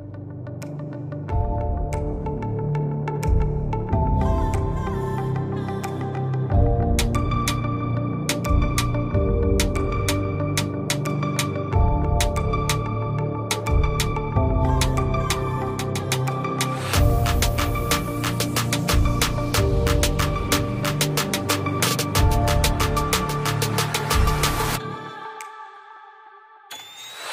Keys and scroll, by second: 0.4 ctrl+i, 0.7 ], 1.2 ctrl+z, 2.3 ctrl+z, 5.9 typing, 9.0 x, 9.9 ctrl+KP_0, 15.9 ctrl+i, 16.6 [, 17.5 x, 18.1 x, 19.4-23.5 typing, 24.6 ctrl+z, 25.5 ctrl+KP_0.